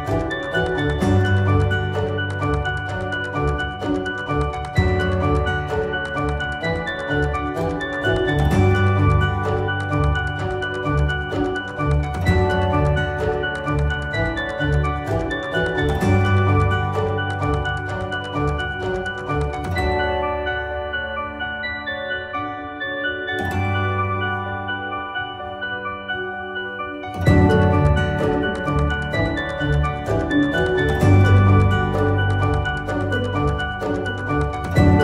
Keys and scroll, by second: 6.2 ctrl+v, 24.1 ctrl+z.